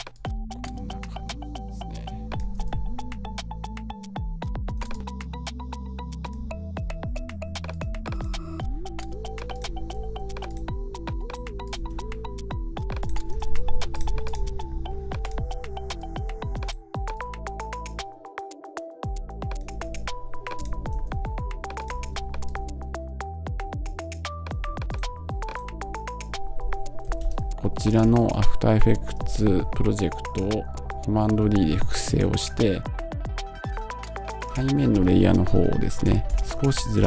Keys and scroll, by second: 35.9 Right, 36.6 Down.